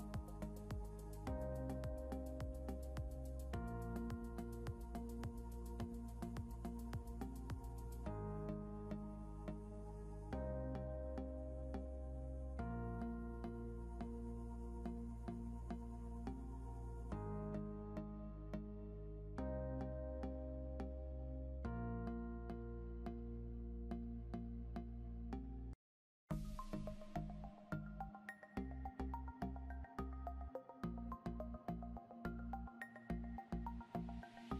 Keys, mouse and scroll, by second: 0.7 right click, 12.8 scroll up 1, 18.6 scroll down 1, 21.8 scroll up 1, 29.7 scroll down 1, 30.6 scroll up 1, 34.1 scroll down 1.